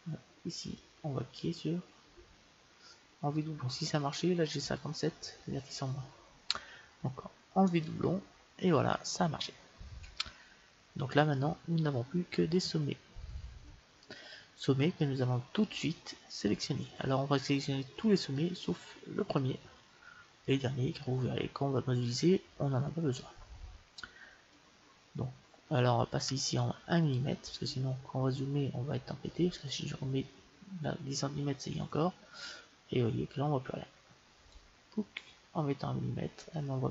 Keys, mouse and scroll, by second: 0.7-2.5 drag, 1.3-2.6 middle drag, 2.6 click, 7.7-9.5 drag, 10.1-12.1 middle drag, 15.0-17.0 middle drag, 19.4-23.7 middle drag, 25.4-26.6 middle drag, 26.6-28.5 drag, 28.2-34.5 middle drag, 34.5-36.3 drag, 36.3 click, 36.3-36.9 middle drag.